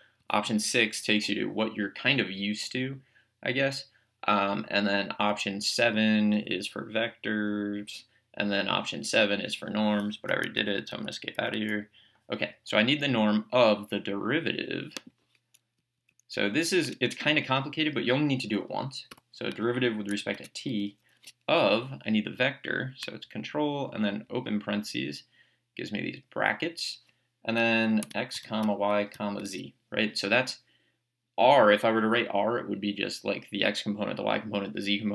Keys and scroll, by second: 0.3 6, 6.4 7, 10.6 Escape, 15.8 Left, 16.9 Return, 19.1 t, 20.3 Tab, 24.4 ctrl+(, 27.8-29.9 typing.